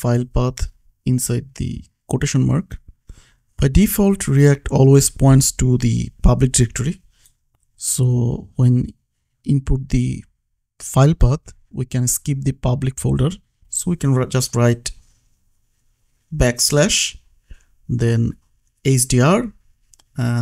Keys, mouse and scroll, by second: 1.7 click, 15.6 3, 15.8 BackSpace, 16.0 h, 18.2 click.